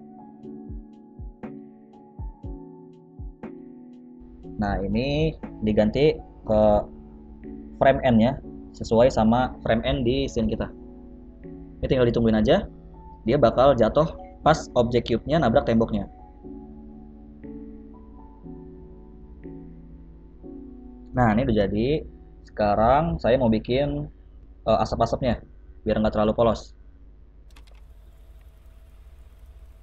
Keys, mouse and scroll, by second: 0.1 scroll down 3, 1.3 scroll down 2, 1.5 middle click, 2.4 space, 3.2 click, 6.6 click, 7.5 KP_0, 9.1 click, 9.4 space, 12.2-12.7 scroll up 4, 12.7 shift+middle click, 13.0 middle click, 13.3 shift+middle click, 26.7 space.